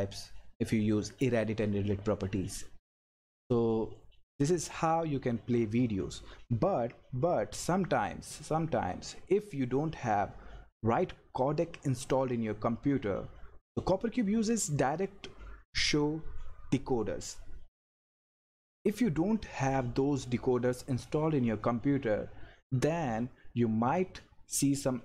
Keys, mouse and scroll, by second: 2.4 scroll down 1, 3.2 click.